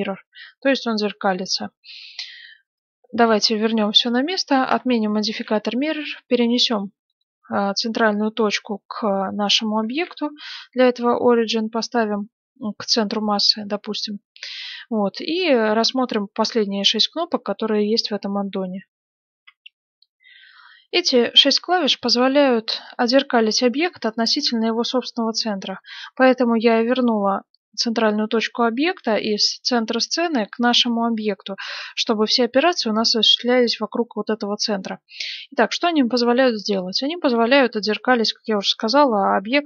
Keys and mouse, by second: 2.7-5.2 drag, 2.7 right click, 3.3-5.2 right drag, 5.2 ctrl+alt+s, 5.2-7.1 middle drag, 7.6-9.8 middle drag, 9.8 ctrl+alt+s, 13.6-19.2 middle drag, 19.2 F9, 21.9-39.6 middle drag.